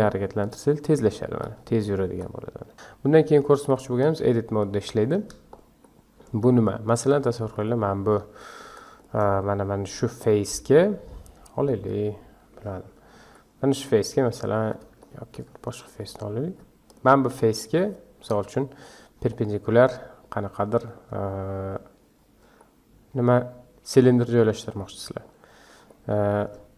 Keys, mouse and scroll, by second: 4.7-5.8 scroll down 1, 5.8-6.4 shift+middle drag, 6.4-7.2 scroll up 5, 7.2-9.0 shift+middle drag, 9.0 click, 10.2 Tab, 11.9 3, 13.2 Tab, 13.7 Tab, 15.0-15.8 shift+middle drag, 15.8 click, 16.5 Tab, 16.9 click, 17.5 scroll up 2, 18.3 KP_Decimal, 19.3-25.3 middle drag, 25.3 scroll up 1, 25.5-25.9 scroll down 1, 25.9-26.7 middle drag.